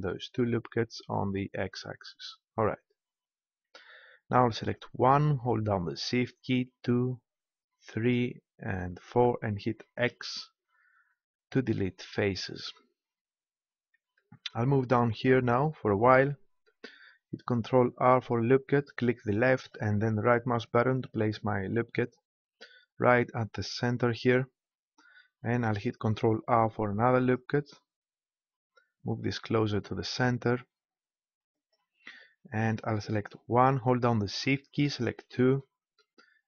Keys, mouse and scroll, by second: 2.2-3.9 drag, 4.7-10.6 right drag, 10.1 x, 17.8 ctrl+r, 21.0-22.9 right drag, 22.9 middle click, 26.5 ctrl+r, 31.7-33.2 drag, 33.2 middle click, 33.6 right click, 34.1-35.2 middle drag, 35.2-36.4 drag.